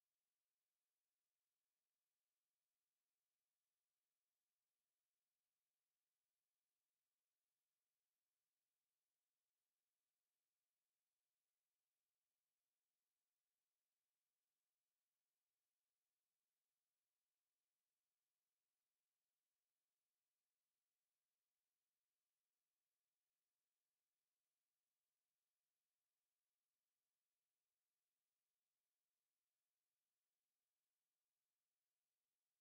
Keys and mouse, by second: 2.9-4.8 drag, 12.0 b, 14.2 shift+d, 21.5 a, 22.3 middle click, 24.7 z, 26.9 Tab, 28.1 a, 28.8 drag.